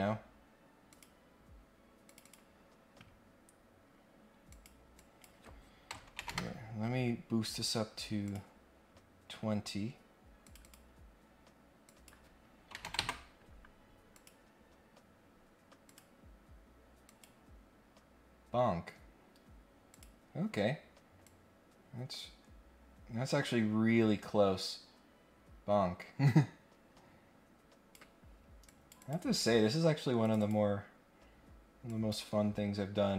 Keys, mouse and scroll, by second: 0.8 click, 2.0 click, 2.2 click, 4.5 click, 4.9 click, 8.2 click, 9.5 scroll up 1, 10.4 click, 10.6 click, 11.8 click, 14.1 click, 15.1 scroll up 2, 15.8 click, 17.0 click, 19.9 click, 21.2-27.9 drag, 28.6 click, 29.0 click, 30.2 click, 30.4 click, 31.8 click.